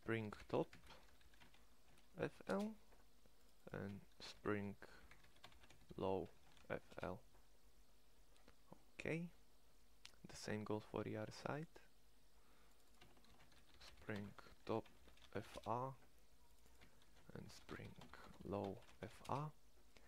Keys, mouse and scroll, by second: 11.5-20.0 middle drag.